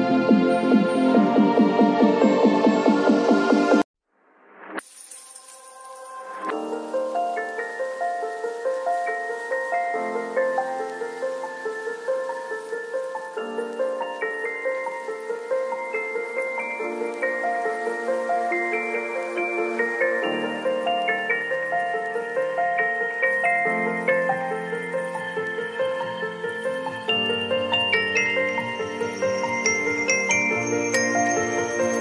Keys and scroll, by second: 7.0 x, 7.8 [, 11.1 x, 13.6 v, 15.7 ctrl+l, 19.8 Return, 20.4 b, 20.7 x, 22.1 ctrl+z, 25.0 x, 30.4 v.